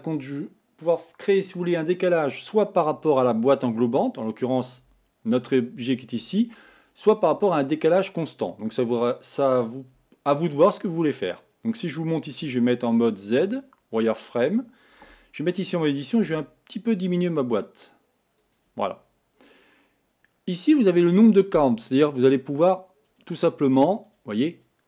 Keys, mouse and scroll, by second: 10.6-12.6 middle drag, 12.6 z, 14.3-15.1 scroll up 2, 15.1 Tab, 16.4 s, 19.0-22.1 scroll up 3, 22.7-24.8 drag.